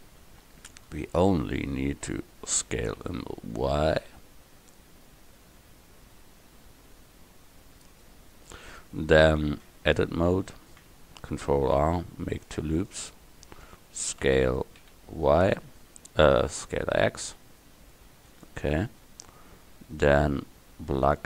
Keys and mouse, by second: 2.7 s, 8.8 middle click, 9.7 Tab, 10.7 click, 11.5 ctrl+r, 14.3 s, 20.1-21.1 middle drag, 21.1 right click.